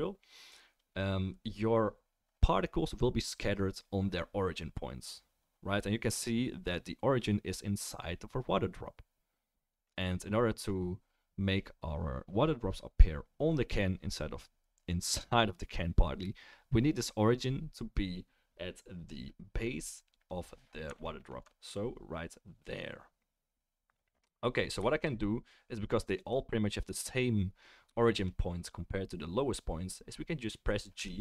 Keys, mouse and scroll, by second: 21.4-25.0 middle drag, 30.9 g.